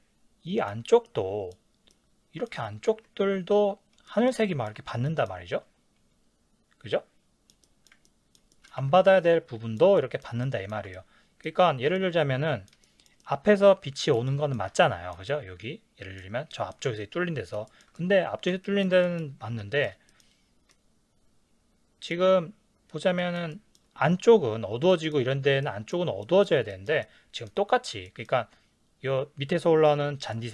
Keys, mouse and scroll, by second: 8.8 ctrl+s.